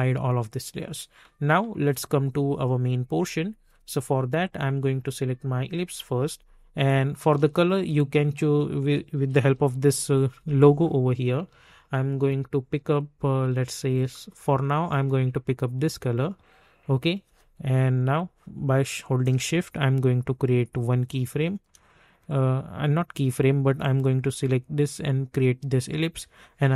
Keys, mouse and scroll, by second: 7.2 space, 9.3 typing, 10.1-12.8 drag, 12.8 click, 18.0-22.2 drag, 22.2 click.